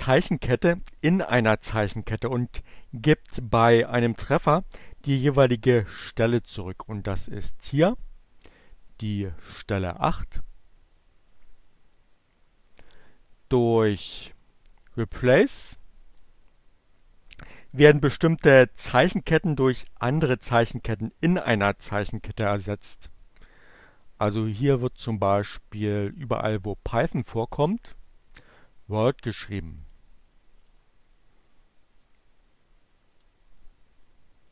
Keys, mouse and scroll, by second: 7.7 click, 14.9-15.9 drag, 26.1-27.4 drag, 28.7-29.9 drag, 30.2 click, 32.1 click.